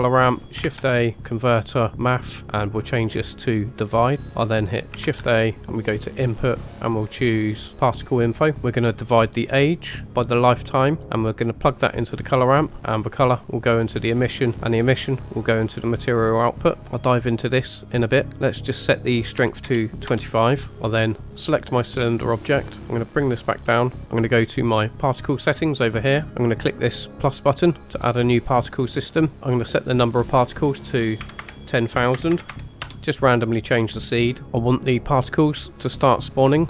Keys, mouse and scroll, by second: 3.4-4.3 drag, 9.2-9.8 drag, 10.2-11.0 drag, 11.5 click, 13.2 click, 13.6 click, 14.8-15.7 drag, 18.3-20.0 drag, 21.5 click, 22.8-24.0 drag, 24.0 shift+middle click, 24.0 scroll up 2, 25.0 click, 27.8 click, 29.3 ctrl+shift+z, 30.0-32.8 drag, 32.3 KP_0, 33.1-34.4 drag.